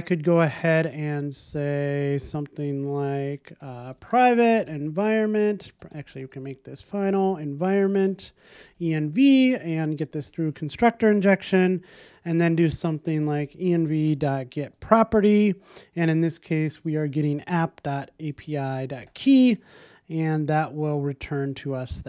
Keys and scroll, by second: 8.1 Return, 9.6 alt+Return, 11.7 alt+shift+Left, 15.1 Return, 21.6 super+s.